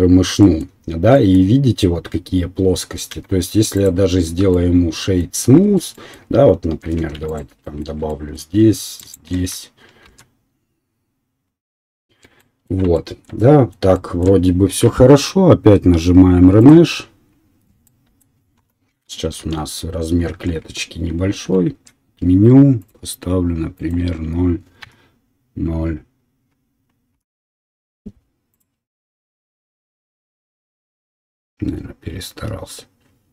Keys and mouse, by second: 3.1 q, 5.6 Tab, 7.0 2, 7.3 alt+click, 9.0 click, 9.0 right click, 10.0 ctrl+b, 11.8 right click, 12.1 Tab, 12.1-16.7 middle drag, 16.7-17.7 drag, 17.7-21.1 right drag, 18.5 KP_1, 19.4 shift+z, 21.3 ctrl+z, 29.3-33.3 right drag.